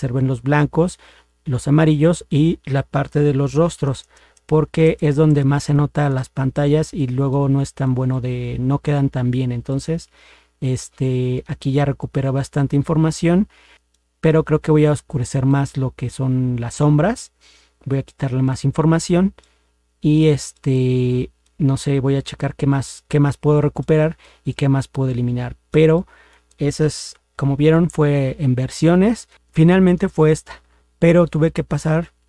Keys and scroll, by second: 3.8 ctrl++, 4.0 ctrl++, 27.2 ctrl+0.